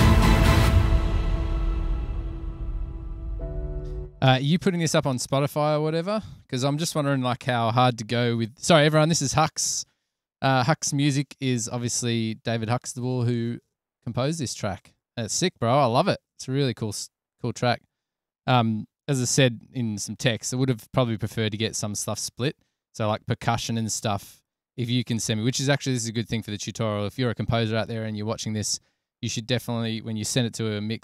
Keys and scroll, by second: 4.6 space, 5.4 Return, 5.6 Return, 19.8 super+=, 30.7 s.